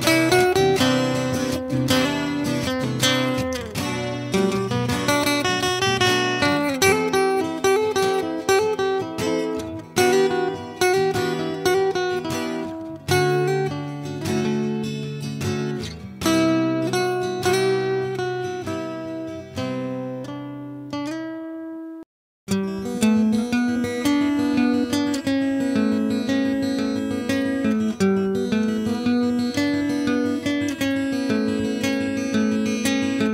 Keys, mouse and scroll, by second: 1.0-2.4 middle drag, 1.9 click, 1.9 right click, 2.7 Delete, 3.1 Tab, 3.5 a, 3.7 a, 4.1 a, 4.5 Tab, 5.0 a, 7.8 click, 9.7 space, 10.5 Down, 13.8-14.4 drag, 13.8-14.4 right drag, 15.3 Tab, 16.1 click, 16.1 right click, 21.5 click, 24.8 Tab, 28.3 a, 29.2 a, 30.0 shift+s, 30.3 shift+a, 31.4-31.8 drag, 31.6 s, 32.0 middle click, 32.5 ctrl+KP_Subtract, 32.7 a.